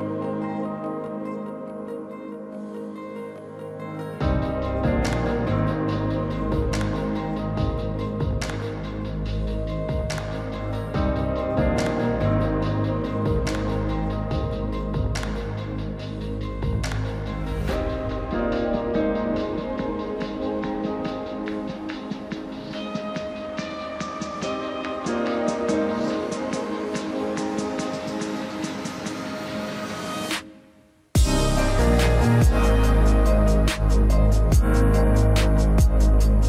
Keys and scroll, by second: 5.2 a.